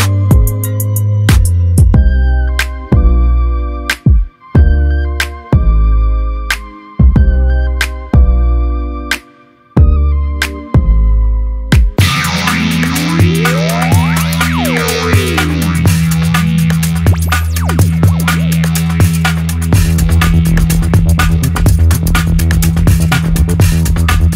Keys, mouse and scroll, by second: 0.0-2.2 drag, 6.3-9.5 drag, 19.4-20.8 drag, 23.3-24.0 click.